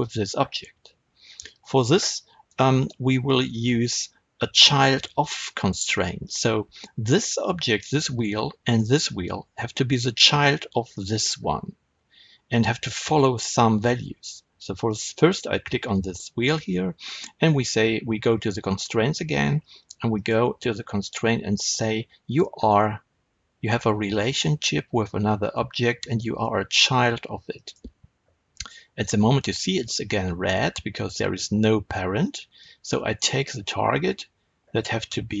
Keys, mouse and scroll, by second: 6.2 click, 10.8 click, 14.8 click, 20.1-35.4 drag.